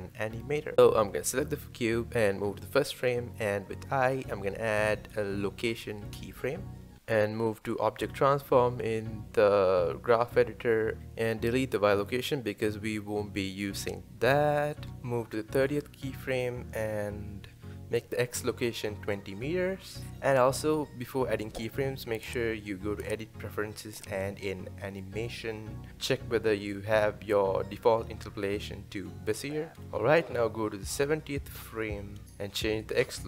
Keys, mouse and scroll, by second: 0.6 click, 9.6 click, 11.1-11.6 shift+middle drag, 11.6 click, 12.7 x, 14.9 shift+middle click, 15.6-27.6 drag, 30.2-33.2 drag.